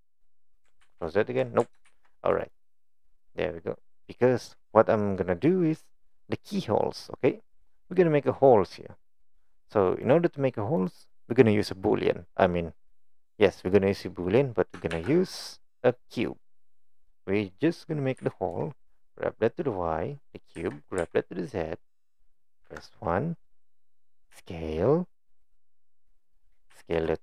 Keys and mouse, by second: 0.8 ctrl+z, 1.9 ctrl+shift+z, 2.5 click, 2.9-3.8 middle drag, 7.2 click, 7.8 click, 9.4 click, 10.0 click, 10.8-12.3 drag, 14.9 shift+a, 18.2 g, 20.6 g, 22.6 KP_1, 24.3 s, 26.7 s.